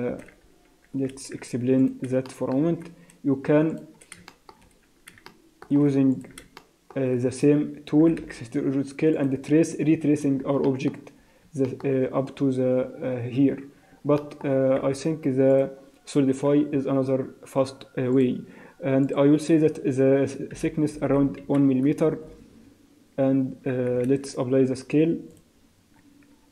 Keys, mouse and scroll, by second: 0.5 Tab, 1.1 z, 2.3 shift+middle click, 2.7 scroll up 2, 3.7 click, 4.3 shift+middle click, 4.6-5.1 scroll up 3, 5.3 shift+middle click, 6.1 alt+click, 6.6 shift+middle click, 8.0 e, 10.1-10.6 scroll down 2, 10.6 shift+middle click, 11.2 scroll down 3, 11.7 shift+middle click, 14.2 shift+middle click, 14.8 x, 16.8 Tab, 18.1 click, 19.0 click, 21.1 0, 24.1 ctrl+a, 26.3 z.